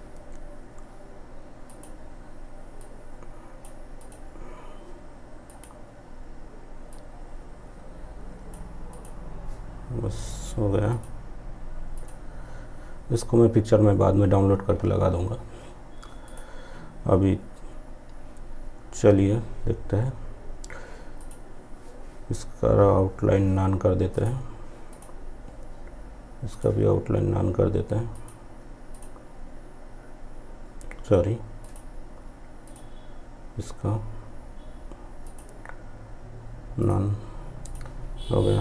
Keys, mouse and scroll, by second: 15.3 click, 20.2 click, 23.2 click, 30.6 click, 34.3 click.